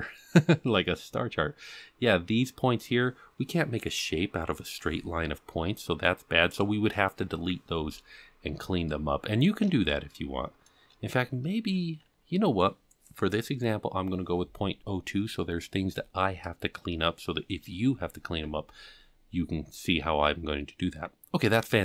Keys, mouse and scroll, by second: 7.5-8.8 scroll down 7, 8.8 shift+middle click, 10.1 shift+middle click, 11.1-13.0 scroll down 3, 21.2-21.5 scroll down 4.